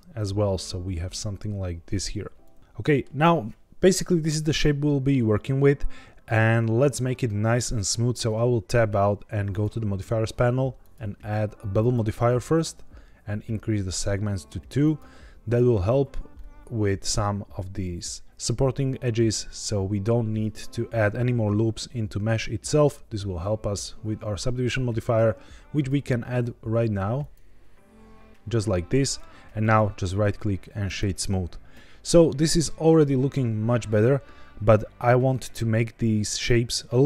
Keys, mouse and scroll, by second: 2.3 click, 2.6 middle click, 3.0-4.2 scroll down 1, 6.6-7.2 scroll up 2, 7.2 middle click, 8.1 Tab, 9.4 click, 11.8 click, 14.7 click, 16.3-16.9 middle drag, 27.3 click, 29.5-30.9 right drag, 32.6-34.6 middle drag.